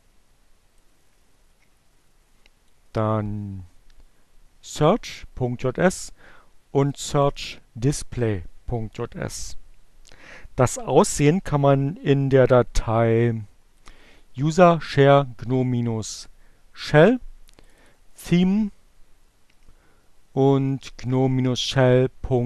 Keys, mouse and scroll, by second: 3.3 click, 5.1 click, 10.8 click, 14.2 click, 17.5 click.